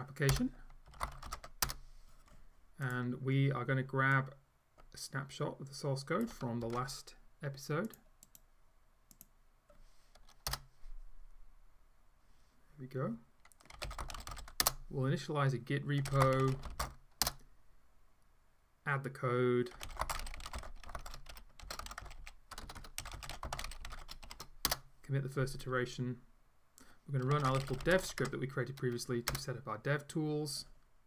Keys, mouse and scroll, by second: 0.4 Return, 0.7-1.8 typing, 8.0 click, 8.3 right click, 9.1 click, 10.5 Return, 13.6-17.2 typing, 17.3 Return, 19.5-24.8 typing, 27.1-28.5 typing, 29.4 Return.